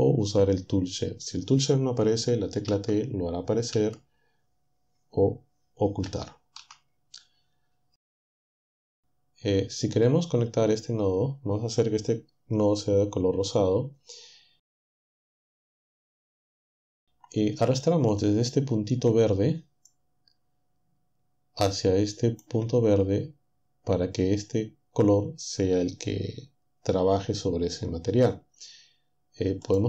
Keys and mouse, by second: 2.7 t, 3.7 t, 6.0 t, 6.6 t, 12.5 click, 14.0-17.0 drag, 19.9-22.6 drag, 29.6 click.